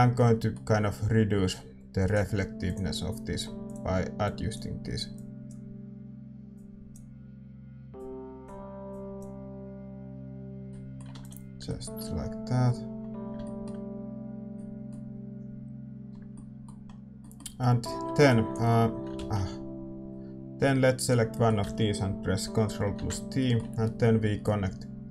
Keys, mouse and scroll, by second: 0.2-2.1 middle drag, 2.1-10.7 drag, 10.7-18.9 middle drag, 14.5 ctrl+s, 18.5-22.9 drag, 19.8 ctrl+z, 21.3-25.1 middle drag, 22.9 ctrl+t, 24.5-25.1 drag.